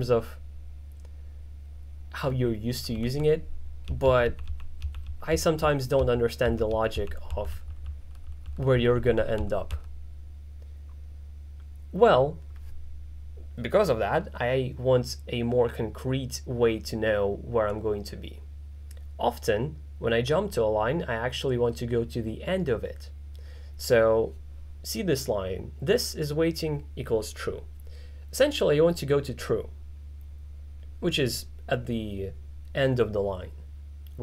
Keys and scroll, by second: 3.0-5.6 typing, 6.7-9.7 typing.